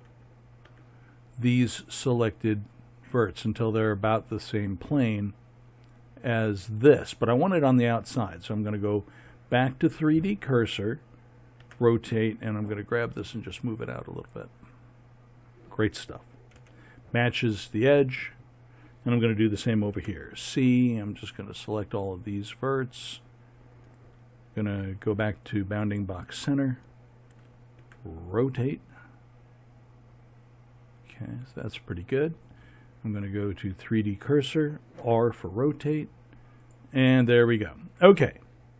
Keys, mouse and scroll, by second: 0.6 r, 11.6 r, 16.5 a, 19.9 c, 25.5 click, 27.8 r, 35.0 r.